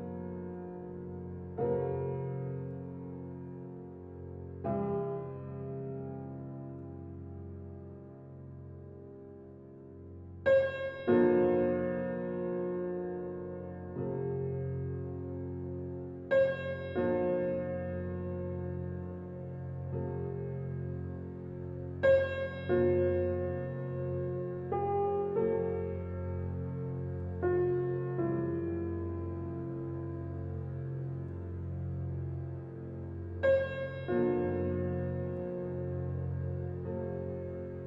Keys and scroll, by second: 12.5 [.